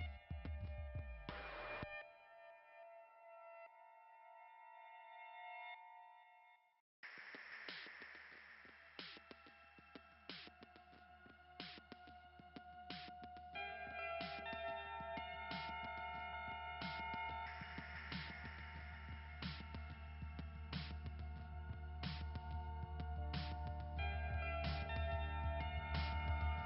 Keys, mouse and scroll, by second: 10.9 right click, 12.7 click, 13.1 click, 14.2 click, 15.3 click, 16.3 right click, 18.7 click, 20.5-21.6 scroll up 1, 21.9 click, 23.0 click.